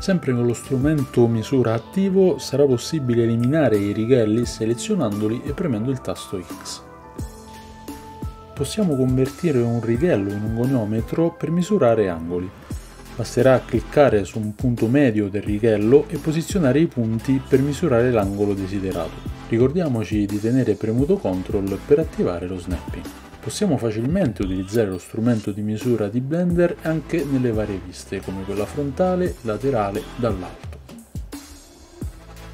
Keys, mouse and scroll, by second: 3.5 x, 4.5 x, 4.9 x, 6.0 x, 6.3 x, 8.1 x, 8.3 x, 8.4-13.2 middle drag, 23.4 ctrl+click, 23.4 ctrl+middle click, 23.4 ctrl+right click, 23.4 ctrl+z, 25.2-26.7 middle drag, 25.2 KP_3, 26.6 KP_7, 28.0 middle click, 29.1 KP_3, 29.2 middle click.